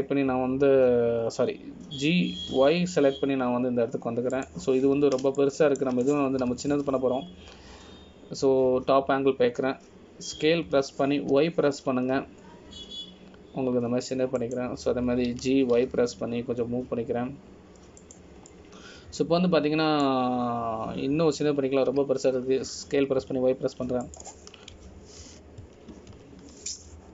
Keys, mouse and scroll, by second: 1.5 g, 7.6 shift+middle click, 8.6 KP_7, 9.4 scroll down 1, 20.7 middle click, 26.9 KP_1.